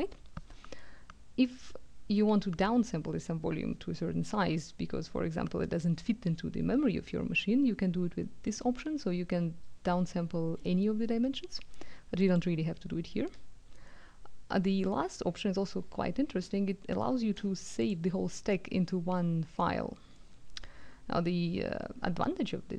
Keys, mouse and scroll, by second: 8.5 click, 12.2 click, 17.8 click.